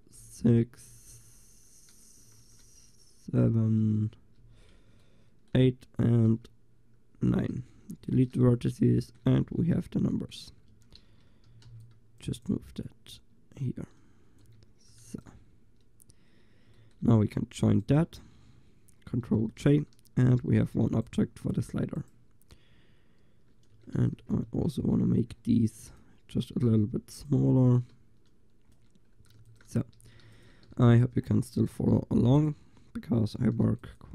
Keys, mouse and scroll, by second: 0.2 l, 0.9 l, 1.2 l, 2.4 ctrl+z, 3.4 l, 3.9 l, 4.6 l, 7.2 l, 7.8 Delete, 8.8 middle click, 9.3 middle click, 9.6 Tab, 10.8 Tab, 11.1 a, 11.5 a, 11.7 c, 12.2 click, 14.5 Tab, 15.1 ctrl+s, 19.3 ctrl+j, 20.7 g, 21.7 g, 23.8 Tab, 24.2 a, 25.0 b, 25.7-30.3 drag, 28.8 Tab, 29.4 ctrl+s, 30.0 a, 30.3 ctrl+s, 31.9 g, 33.4 ctrl+s.